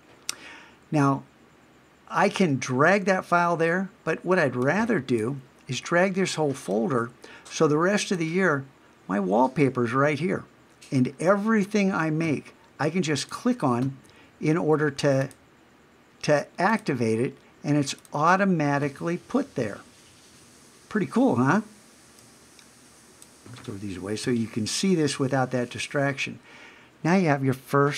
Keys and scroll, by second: 24.2 super+BackSpace.